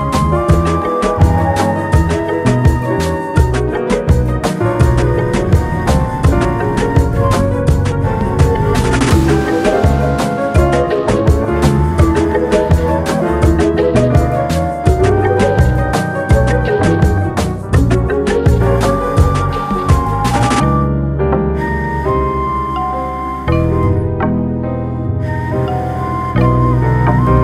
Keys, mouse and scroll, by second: 5.6 scroll down 2, 5.9 shift+middle click, 6.7 scroll up 2, 7.1 click, 8.0 r, 9.4 g, 10.4-11.1 scroll down 10, 11.1 Tab, 11.6 click, 11.8-12.4 middle drag, 12.4 click, 13.0 click, 13.7 g, 15.3-16.3 middle drag, 16.3 scroll down 1, 16.5 click, 16.9-17.2 scroll down 1, 17.2-18.8 middle drag, 18.9 click, 19.1-20.7 scroll down 2, 21.8 shift+a, 25.2 alt+middle click, 26.0 g.